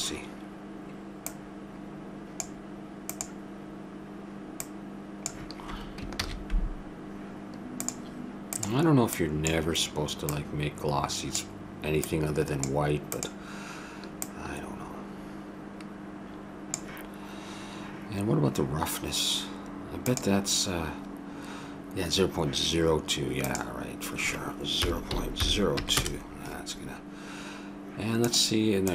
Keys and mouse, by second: 1.2 click, 3.1-5.4 drag, 6.2 shift+a, 9.2-15.0 drag, 23.5-25.5 drag.